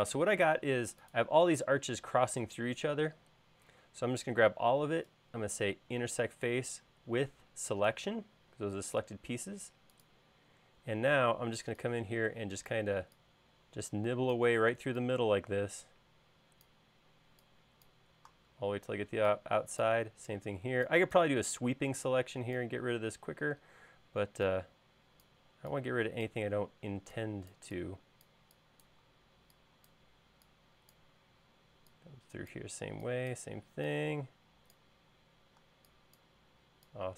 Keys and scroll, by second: 10.9 e.